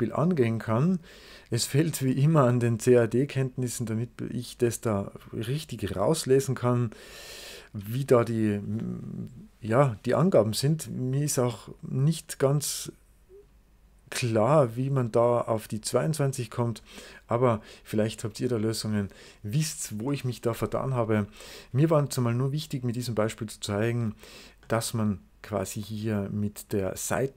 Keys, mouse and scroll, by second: 3.0-4.4 drag, 5.2-7.0 drag, 10.4 click, 14.0 click, 16.1 click, 24.5-27.3 middle drag.